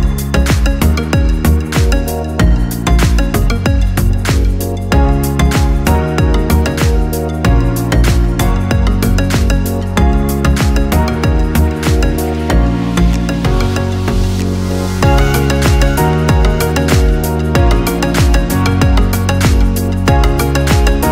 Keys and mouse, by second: 0.2 g, 1.4 KP_3, 2.2 g, 3.4-4.1 middle drag, 4.6 right drag, 5.1 middle drag, 5.6-6.0 right drag, 6.0 middle click, 6.4 g, 8.2 KP_1, 9.7 g, 11.6 KP_3, 11.9 g, 13.1 right click, 13.3 middle click, 13.9 Tab, 14.6 alt+right click, 14.9 middle click, 15.7 e, 17.0 middle click, 17.5 alt+z, 18.5 alt+z, 18.9 middle click, 19.6 right click, 20.9 shift+right drag.